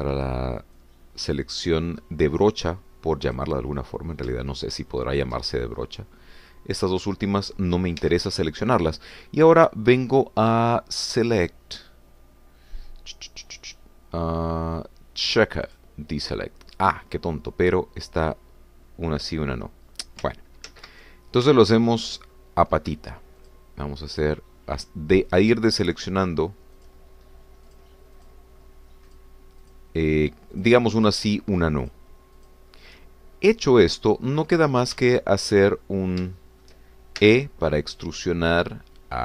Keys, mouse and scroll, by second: 0.2 c, 1.8-4.6 drag, 6.6 shift+middle click, 8.2 middle click, 9.0 Escape, 12.1 click, 16.7 click, 20.2 scroll up 2, 20.9 scroll down 2, 21.7 ctrl+z, 22.5 shift+middle click, 23.3 shift+scroll up 2, 24.4 shift+click, 25.3 shift+click, 25.9 shift+click, 26.3 shift+click, 27.2 shift+click, 27.8 shift+click, 28.8 shift+click, 29.2 shift+click, 30.2 shift+click, 30.6 shift+click, 31.7 shift+click, 32.0 shift+click, 33.0 shift+click, 33.4 shift+click, 35.1 scroll down 2, 35.5 click, 36.2 shift+click, 37.1 shift+scroll up 1, 37.4 shift+click, 38.2 shift+e.